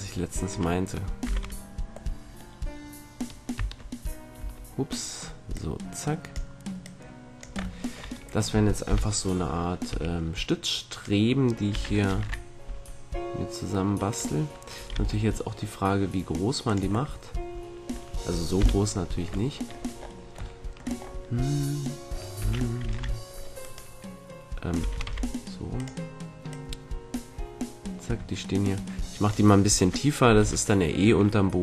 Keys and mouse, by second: 1.2-4.3 drag, 1.2 z, 3.5 Tab, 4.3 Tab, 5.5 click, 6.5-7.5 drag, 7.9 click, 8.8 KP_7, 9.8 s, 11.7 s, 12.0-13.1 right drag, 13.1-14.1 middle drag, 14.1-15.7 drag, 14.9 g, 16.7-18.5 drag, 18.5 KP_1, 22.3 s, 24.7 s, 25.8-28.4 drag, 30.3 a.